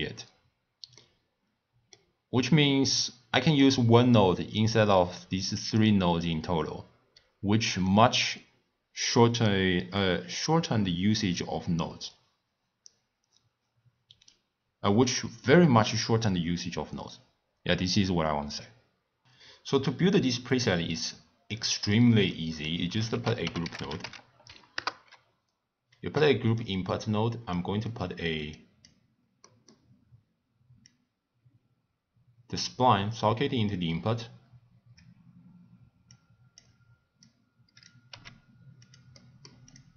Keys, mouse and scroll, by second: 3.6 click, 4.9 drag, 7.8-11.0 middle drag, 19.7 click, 21.5-23.1 middle drag, 23.1 ctrl+a, 27.5-28.5 middle drag, 28.5 click, 29.5-30.8 middle drag, 30.8 click, 36.1 click, 37.2 drag, 38.1 g, 39.2-39.7 middle drag, 39.7 click.